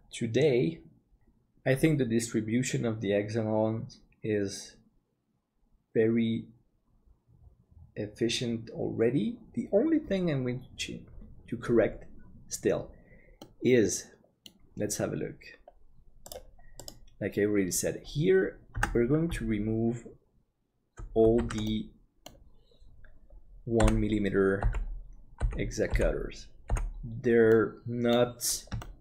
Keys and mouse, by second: 13.4-14.5 middle drag, 20.7 alt+Tab, 21.4 alt+a, 21.7 middle click, 23.8 l, 24.6 l, 27.6 middle click, 28.9 middle click.